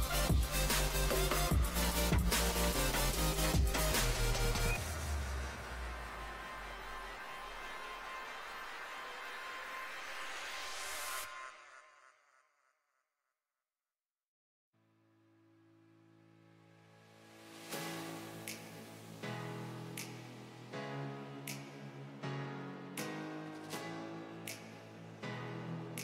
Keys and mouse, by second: 0.5 z, 3.7 s, 5.6 Tab, 7.8 z, 8.6 z, 9.6 s, 14.2 s, 17.0 s, 21.7 a, 23.7 ctrl+a, 25.3 z, 25.6-26.0 drag.